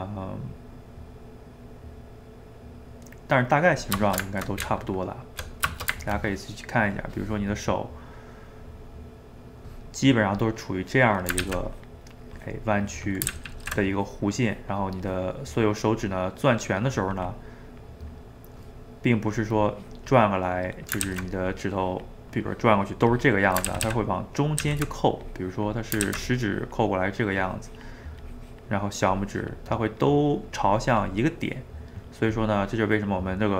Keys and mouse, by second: 4.0 ctrl+shift+middle click, 4.6 Tab, 5.7-6.9 ctrl+shift+middle drag, 6.9 click, 7.5-10.4 middle drag, 10.4-11.5 drag, 11.5 ctrl+z, 11.7-13.4 drag, 13.4 ctrl+z, 13.5 ctrl+z, 14.0-16.5 drag, 16.5-19.5 middle drag, 19.5-20.7 drag, 20.7 middle click, 21.1 ctrl+z, 21.5-23.7 drag, 23.7 ctrl+z, 23.9 ctrl+z, 24.7 ctrl+z, 25.2 click, 26.1 ctrl+z, 26.3-32.8 drag, 32.8-33.5 middle drag.